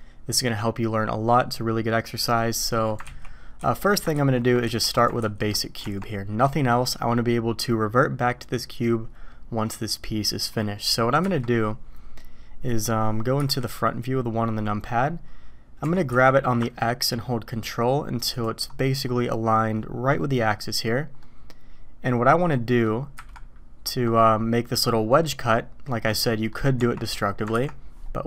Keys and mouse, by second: 2.7 middle click, 3.0 ctrl+z, 3.6 ctrl+z, 4.1 ctrl+z, 4.6 ctrl+z, 5.2 ctrl+z, 5.8 Tab, 11.2 KP_1, 13.4 KP_1, 15.8 g, 21.2-22.5 middle drag, 23.1 KP_1, 26.5 click, 26.8 Tab, 27.5 ctrl+b.